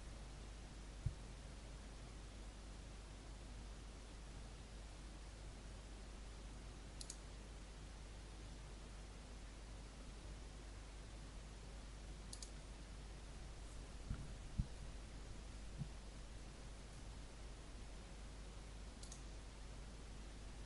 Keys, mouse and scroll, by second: 3.3 Return, 6.9-20.6 drag.